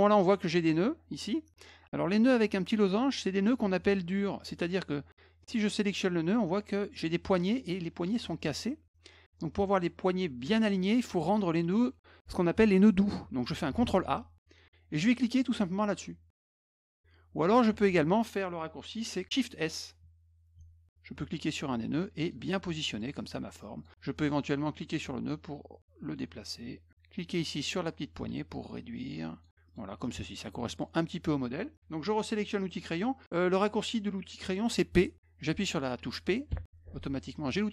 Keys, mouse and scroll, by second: 5.4 click, 13.8 ctrl+a, 16.4 click, 20.9-22.3 drag, 22.9 click, 23.2 click, 23.8 click, 24.8-26.9 drag, 27.6-29.4 drag, 29.7 click, 30.0 click, 30.7 click, 36.5 p.